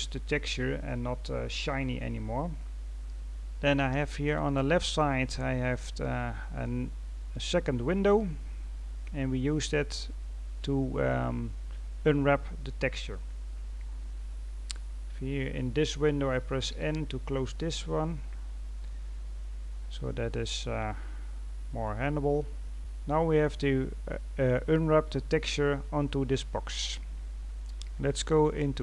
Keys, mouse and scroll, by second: 6.4-8.5 drag, 8.5-9.4 scroll down 3, 9.4-9.9 scroll up 3, 9.9-10.7 scroll down 1, 10.7-11.3 scroll down 1, 11.3-12.0 scroll down 1, 12.0-12.7 scroll down 1, 12.7-15.8 scroll down 2, 18.1-18.5 scroll down 2, 18.5-19.5 scroll up 3, 19.5-20.5 scroll down 1, 20.5-22.7 middle drag.